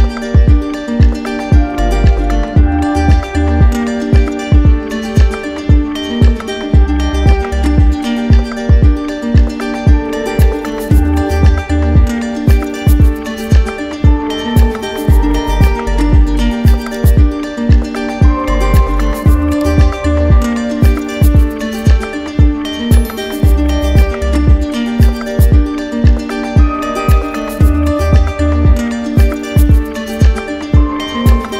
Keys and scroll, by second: 28.5 ctrl+alt+z.